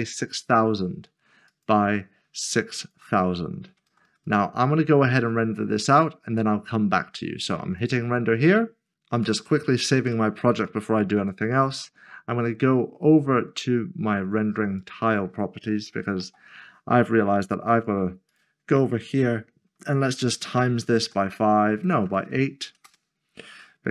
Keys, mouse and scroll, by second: 0.0-0.1 typing, 1.5 click, 3.9-4.3 typing, 5.9 click, 9.2 click, 10.0 ctrl+s, 11.2 click, 14.8 click, 15.9 typing, 17.7 click, 19.7 s, 21.0 typing, 22.1-22.7 typing, 22.8 Return.